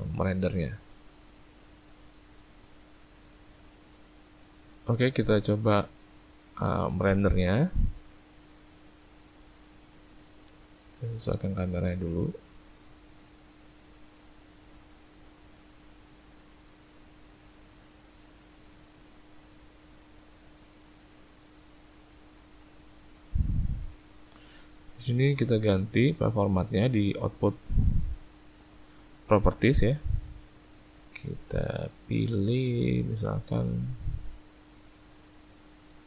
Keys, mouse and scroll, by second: 8.5 click, 11.6 shift+middle click, 15.0 click, 20.3 click, 30.7 click.